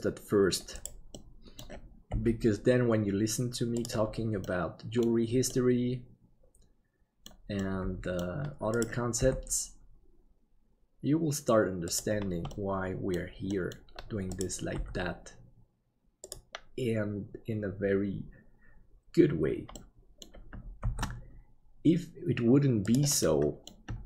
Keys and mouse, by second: 1.1 middle click, 2.1 g, 4.6 middle click, 5.6-7.3 middle drag, 7.6 middle click, 9.2 g, 12.7 middle click, 13.7 middle click, 14.8 g, 19.9 middle click, 20.8 shift+d, 23.3 middle click.